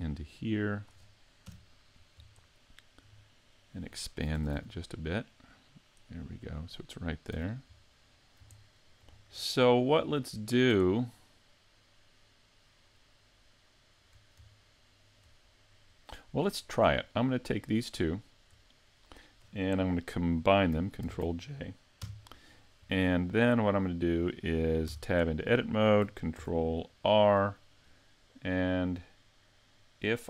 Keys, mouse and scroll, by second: 1.5 KP_Decimal, 2.5 shift+middle click, 3.2 middle click, 4.4 s, 6.7 click, 7.3 a, 7.8 middle click, 7.8 s, 8.6 shift+middle click, 9.2-9.6 scroll down 2, 9.6 shift+middle click, 10.3 middle click, 10.9 shift+middle click, 11.5 shift+middle click, 14.6 shift+middle click, 16.6 right click, 18.0 shift+right click, 18.9-19.8 scroll down 1, 21.0 ctrl+j, 22.0 KP_Decimal, 23.5 middle click, 24.9 Tab, 25.3 middle click, 26.4 ctrl+r, 29.8 ctrl+r.